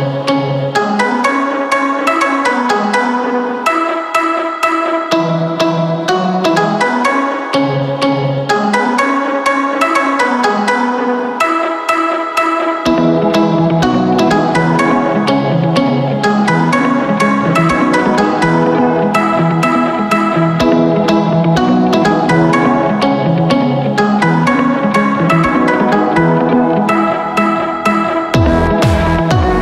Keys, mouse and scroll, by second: 4.1-17.8 drag, 23.9-29.6 drag.